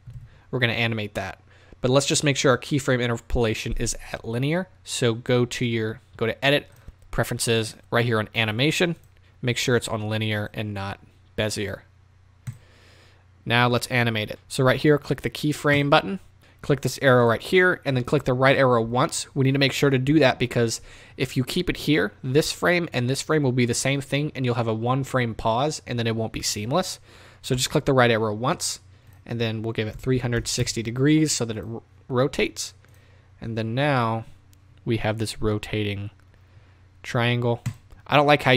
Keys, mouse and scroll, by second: 0.2 z, 6.9-14.3 drag, 15.8 click, 17.3 click, 18.8 Right, 20.1 Left, 27.5 Right, 30.6 click, 30.7 KP_Enter, 31.5 click, 32.9-33.4 drag, 37.7-38.5 drag.